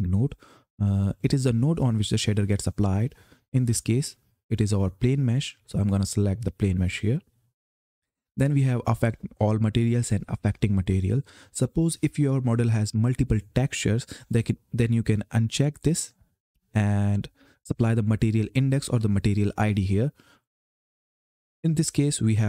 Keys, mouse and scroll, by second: 1.8 click, 15.5 click.